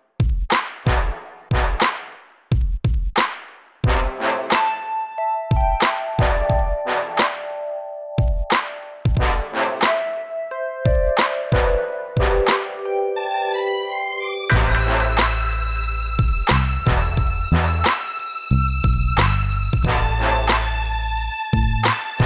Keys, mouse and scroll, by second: 2.9 scroll down 1, 5.2 click, 5.7 click, 6.4 scroll down 1, 7.0 scroll up 1, 7.6 scroll up 1, 8.4 click, 9.3 click, 10.3 click, 12.3 click, 13.0 click, 14.2 click, 14.6 scroll down 2, 15.7 click, 16.9 click, 19.1 click, 20.0 click.